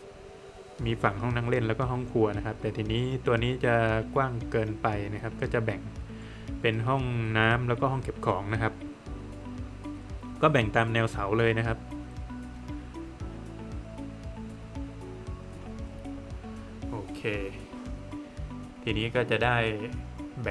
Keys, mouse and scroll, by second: 0.4 middle click, 5.4-5.8 scroll up 1, 6.3 middle click, 7.5 click, 9.5 scroll up 1, 11.1 scroll up 1, 12.0 click, 12.5 scroll down 1, 12.7 middle click, 13.7 click, 16.5 scroll down 1, 17.0 middle click, 17.2 Escape, 17.7 scroll down 1, 17.9 middle click, 20.0 typing.